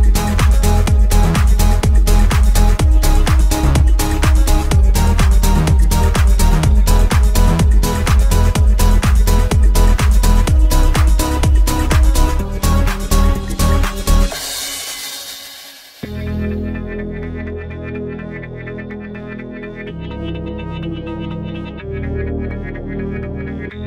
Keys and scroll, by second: 4.0 7, 4.3 Return, 19.4 5, 19.7 Return.